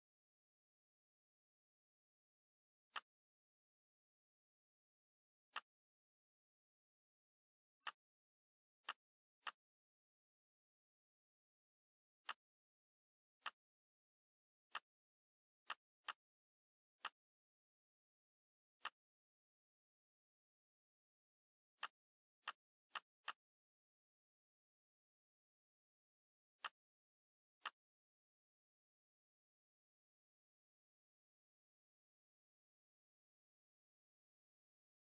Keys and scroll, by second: 17.9 ctrl+shift+c, 20.0 ctrl+v, 32.8 Left, 33.1 Left, 33.2 Left, 33.8 Left.